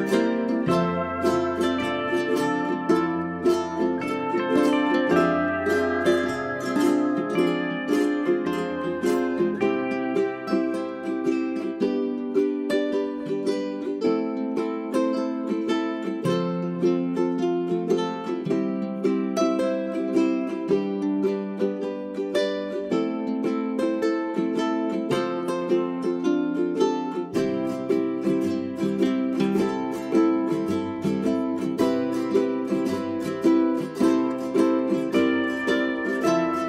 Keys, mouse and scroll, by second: 2.0 scroll up 1, 2.3 click, 3.0 shift+click, 3.5 click, 4.0 Delete, 4.2-4.5 scroll down 1, 4.5-5.7 drag, 6.1 scroll up 1, 6.7-9.2 drag, 10.2 space, 10.5 click, 11.1-11.4 scroll up 1, 11.4 click, 15.2-15.7 scroll down 1, 15.7-17.7 drag, 17.7 space, 17.9-19.3 scroll down 1, 19.3-27.7 drag, 28.3 scroll down 1, 28.9-31.6 scroll up 1, 31.8-36.6 drag.